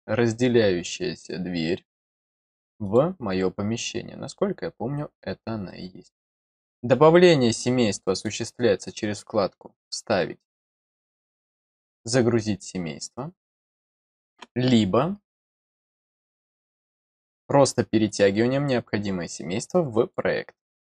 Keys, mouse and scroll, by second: 2.8 click, 5.6 click, 7.4 click, 8.8 click, 10.5 click, 18.0-20.1 drag.